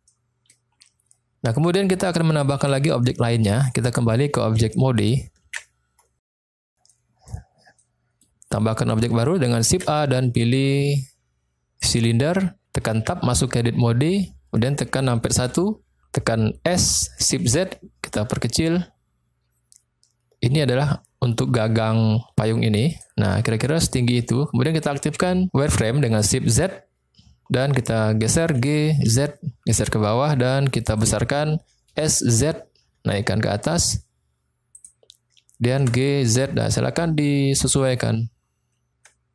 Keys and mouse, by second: 0.0-0.5 middle drag, 5.5 ctrl+Tab, 6.9 middle click, 7.7 click, 7.7 middle click, 8.5 click, 8.5 middle click, 9.5 shift+a, 13.0 Tab, 15.4 KP_1, 16.8 s, 17.5 shift+z, 23.0 click, 26.9 shift+z, 28.6 g, 29.0 z, 31.0 click, 31.9 s, 32.2 z, 34.8 click, 35.8 g, 36.3 z, 37.7 click.